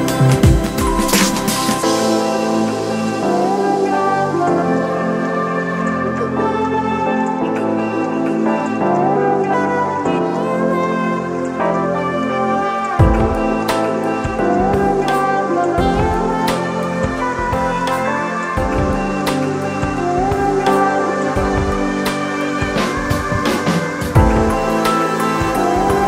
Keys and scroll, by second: 15.2 super+z.